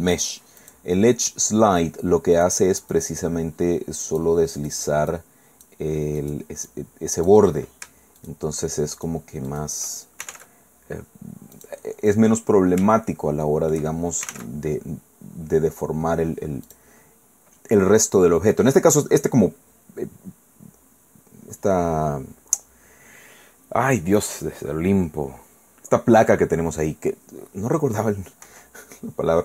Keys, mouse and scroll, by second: 0.6 click, 2.3 click, 2.9-4.4 drag, 4.6 click, 5.1 click, 6.2 click, 6.7 click, 8.2 shift+click, 8.4 shift+right click, 9.0 shift+right click, 9.5 shift+right click, 10.0-10.8 typing, 11.5 click, 13.4 shift+click, 14.0-14.8 typing, 16.7 click, 18.2 scroll down 1, 25.0-25.3 scroll down 1, 25.3-26.3 scroll up 1, 28.4 i.